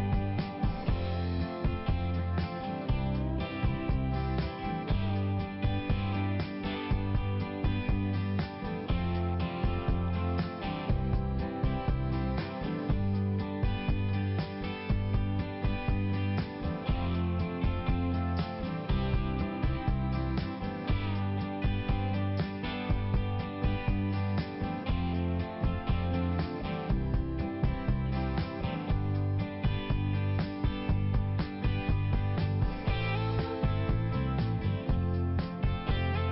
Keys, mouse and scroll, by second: 1.0 typing, 2.5 click, 4.0 click, 4.2 click, 4.6 click, 5.1 click, 5.2 click, 5.5 click, 5.6 double click, 5.9 double click, 6.0 double click, 7.0 click, 7.0 click, 7.3 click, 7.4 click, 7.6 click, 7.7 double click, 7.9 double click, 8.0 double click, 8.2 double click, 8.3 double click, 8.5 double click, 8.6 double click, 8.7 double click, 8.8 double click, 9.1 double click, 9.2 double click, 9.5 double click, 9.5 double click, 9.7 double click, 9.8 double click, 10.1 double click, 10.3 double click, 10.4 double click, 10.5 double click, 10.8 double click, 10.9 double click, 11.2 double click, 11.3 double click, 11.6 double click, 11.8 double click, 12.0 click, 12.1 click, 12.5 double click, 12.7 double click, 12.8 double click, 12.9 double click, 13.0 double click, 13.1 double click, 13.3 double click, 13.5 double click, 13.7 double click, 14.0 double click, 14.1 double click, 14.4 double click, 14.5 double click, 14.6 double click, 14.7 double click, 15.1 double click, 15.9 double click, 16.2 double click, 16.4 double click, 16.7 double click, 17.4 click, 17.5 click, 17.7 click, 17.9 double click, 18.3 double click, 18.4 double click, 18.7 double click, 18.8 double click, 19.1 double click, 19.2 double click, 19.4 double click, 19.6 double click, 20.0 double click, 20.1 double click, 21.1 click, 21.2 click, 21.6 click, 21.7 click, 22.2 click, 22.3 click, 22.9 click, 24.2 [, 24.6 [, 24.9 click, 25.2 click, 25.5 click, 25.6 double click, 25.7 double click, 25.8 double click, 26.1 double click, 26.2 double click, 26.4 double click, 26.5 double click, 26.7 double click, 26.8 double click, 27.1 double click, 27.2 double click, 27.4 double click, 27.6 double click, 27.8 double click, 27.9 double click, 28.3 double click, 29.9 click, 30.2 click, 30.6 click, 31.2 click, 32.7 ], 34.3 click, 34.4 click, 35.5 click, 35.6 click, 35.9 click, 36.0 click, 36.2 click.